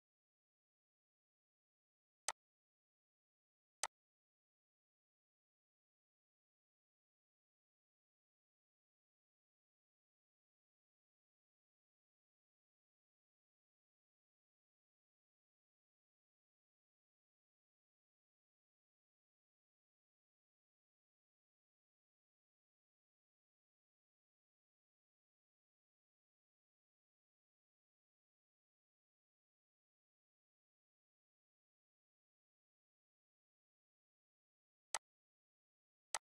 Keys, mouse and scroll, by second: 2.2 click.